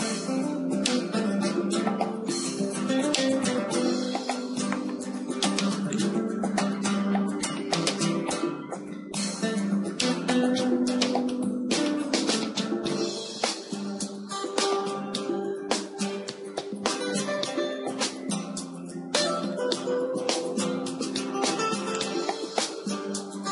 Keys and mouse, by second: 0.6 r, 3.3 g, 7.2-11.1 drag, 10.1 KP_0, 11.1 z, 14.5-22.1 right drag, 17.3 ctrl+j, 22.1 middle click, 22.3-23.5 drag.